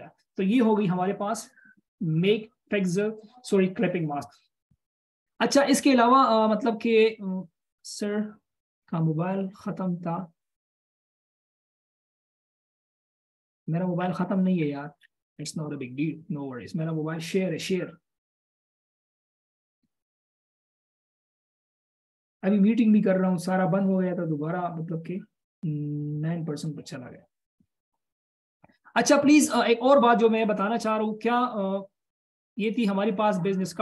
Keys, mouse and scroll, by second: 13.6-16.2 scroll down 1.